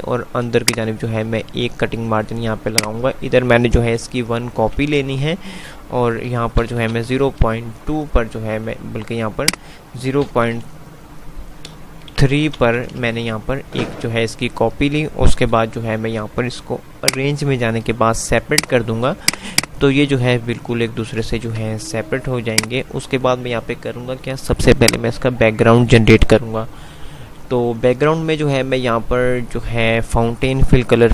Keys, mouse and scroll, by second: 1.9 typing, 16.4 F5, 17.0-20.5 drag, 21.5 z, 22.7 click, 25.0 click.